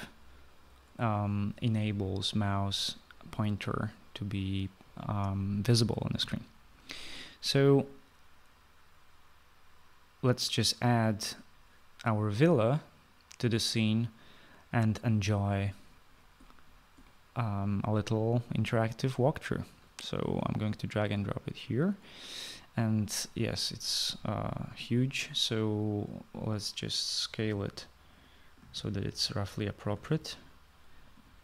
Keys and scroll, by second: 27.1-30.4 typing.